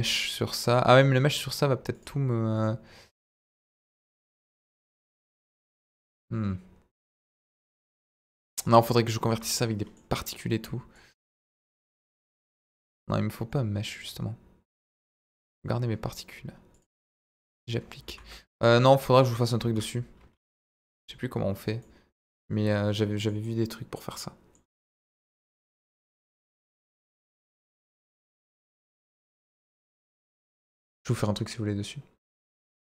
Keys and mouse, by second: 0.6 click, 3.0 click, 3.9 click, 5.6-9.4 drag, 9.4-10.0 middle drag, 10.9-12.9 drag, 13.9 click, 15.4 click, 16.7 click, 17.2 ctrl+a, 18.1 ctrl+z, 19.1 click, 19.6 ctrl+a, 20.3 ctrl+z, 21.8-23.3 middle drag, 23.4-24.6 middle drag, 25.5-29.8 drag.